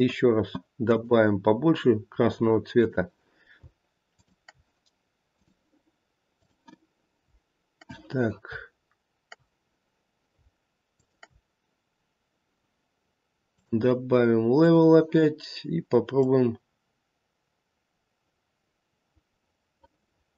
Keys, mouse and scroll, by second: 0.8 click, 4.1 shift+click, 5.3 click, 10.9 shift+click, 13.4 click, 16.2 click.